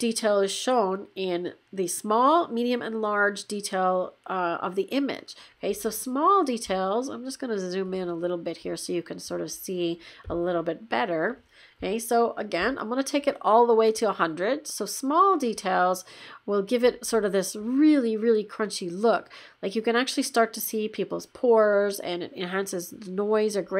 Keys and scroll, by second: 7.9 shift+5.